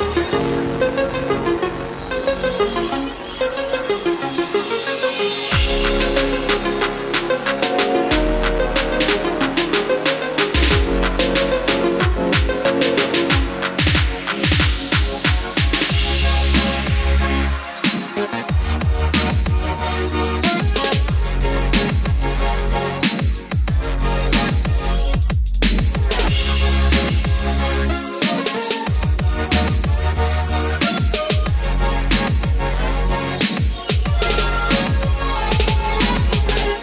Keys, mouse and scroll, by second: 0.5 scroll up 1, 3.3-3.9 scroll down 1, 4.9-5.2 scroll up 1, 7.5-10.1 drag, 10.3 KP_1, 12.0-13.8 drag, 13.8 KP_1, 15.3 scroll down 1, 18.3 click, 19.8 F4, 24.8-36.8 drag.